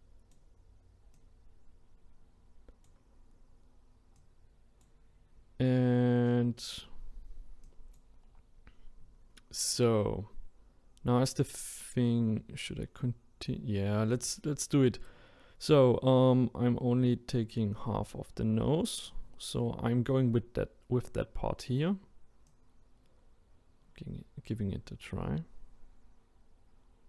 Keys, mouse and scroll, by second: 7.6-27.0 drag.